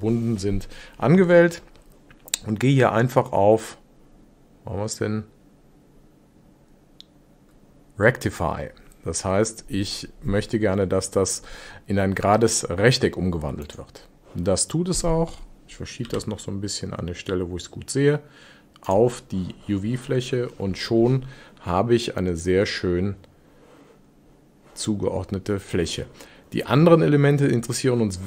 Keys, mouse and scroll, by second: 13.7 click, 16.1 g.